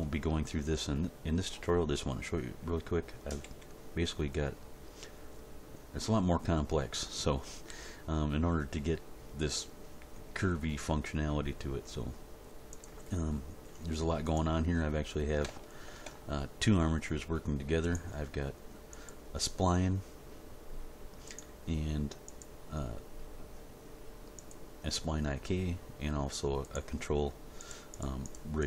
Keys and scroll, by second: 3.4 g.